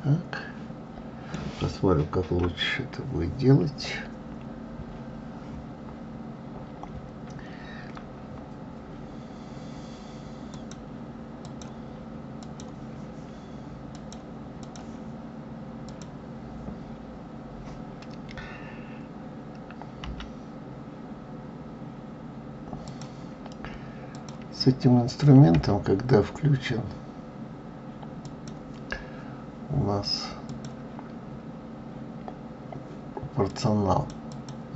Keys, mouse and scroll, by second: 2.4 KP_1, 10.5 click, 11.4-16.0 drag, 24.1 click, 25.5 g, 30.5 click, 33.5 click, 34.3 click.